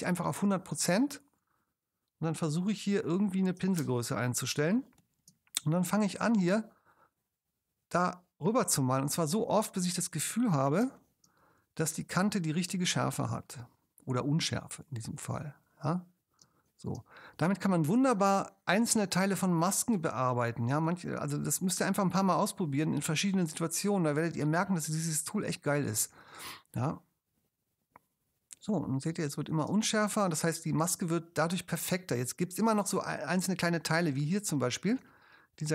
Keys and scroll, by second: 3.8 ctrl+alt+space, 4.8 space, 10.9 space, 16.4 space, 21.5 space, 26.0 space, 29.7 space, 31.6 space.